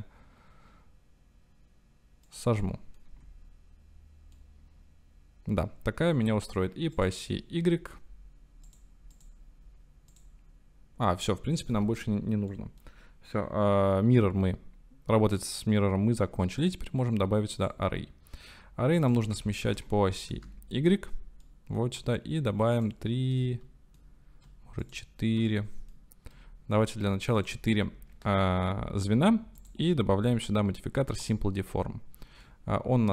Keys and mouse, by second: 2.3 right click, 2.6 middle click, 3.2 Tab, 4.4-6.3 middle drag, 7.0 click, 8.6 click, 9.2 click, 10.1-11.9 drag, 12.6 click, 15.4-15.9 drag, 15.9-16.3 middle drag, 16.7-17.6 drag, 19.0-20.9 drag, 21.4 middle click, 23.4 shift+click, 24.8 click, 25.5-25.9 shift+drag, 29.7-31.3 drag, 32.4-33.1 drag.